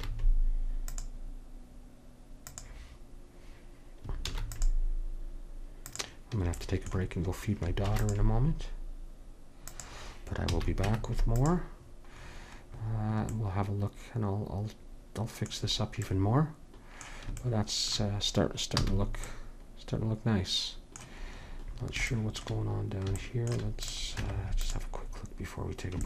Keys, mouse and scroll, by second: 4.3 ctrl+r, 7.9 ctrl+r, 10.6 a, 10.9 Tab, 18.8 a, 23.9-25.6 drag, 24.2 Tab.